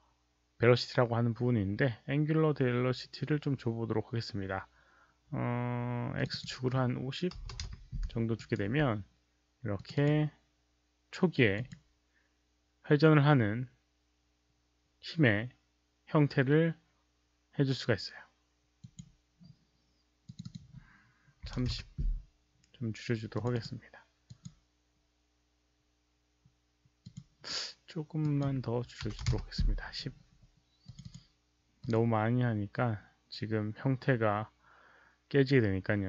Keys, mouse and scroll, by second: 2.1 alt+click, 2.1 alt+right click, 6.1 click, 6.2 click, 7.4 click, 7.4 KP_5, 7.5 KP_0, 7.6 Return, 8.3 alt+right click, 8.7 click, 8.7 KP_0, 8.7 KP_5, 9.7 click, 10.0 Return, 10.0 alt+right click, 10.0 KP_0, 10.0 KP_5, 11.5 click, 12.7 click, 12.7 KP_5, 16.9 Return, 16.9 click, 16.9 alt+right click, 16.9 KP_0, 16.9 KP_5, 18.9 click, 20.2 click, 20.4 click, 21.4-23.8 typing, 21.6 Return, 22.4 Return, 22.4 click, 23.3 click, 23.3 Return, 23.8 Return, 23.8 click, 24.2 click, 27.0 click, 28.1 Return, 28.1 KP_3, 28.1 KP_0, 28.2 click, 29.0 KP_1, 29.2 Return, 29.2 KP_0, 30.8 Return, 30.8 click, 31.7 click, 31.9 Return, 31.9 KP_0, 31.9 KP_1.